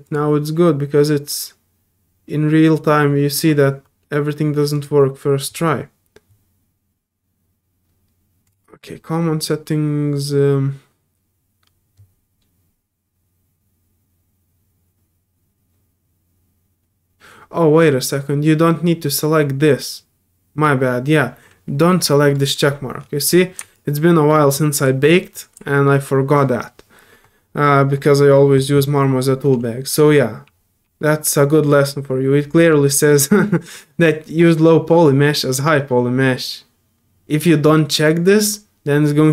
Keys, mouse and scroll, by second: 0.0 click, 4.7 click, 8.4 click, 17.8 click, 22.7 scroll up 2, 23.3 middle click, 23.7-24.8 alt+drag, 25.1 alt+middle click, 25.7 alt+middle click.